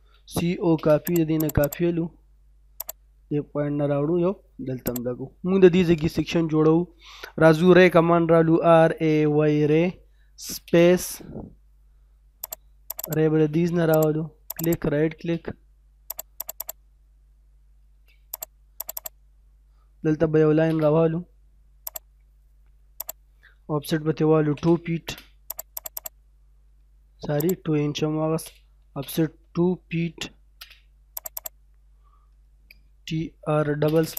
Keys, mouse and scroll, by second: 0.1-0.7 typing, 1.1 click, 1.7 right click, 2.2-2.8 scroll up 1, 2.8 click, 3.1 scroll down 1, 3.8-4.8 scroll up 1, 4.8 click, 6.2-8.1 scroll down 2, 6.3 middle click, 8.3-9.2 typing, 10.6 space, 11.4 middle click, 12.4 click, 13.1 right click, 13.3 space, 14.0 click, 14.6 right click, 15.1 space, 16.1 click, 16.6 right click, 17.8 space, 18.3 click, 19.0 right click, 19.3 middle click, 20.4 l, 20.6 space, 20.9 middle click, 21.3-21.9 scroll up 1, 21.9 click, 24.3 o, 24.4 space, 24.8 2, 25.0 space, 25.5 click, 26.8 scroll up 1, 27.4 click, 28.2-30.5 typing, 31.2 click, 31.7 scroll down 1, 33.2-34.1 typing.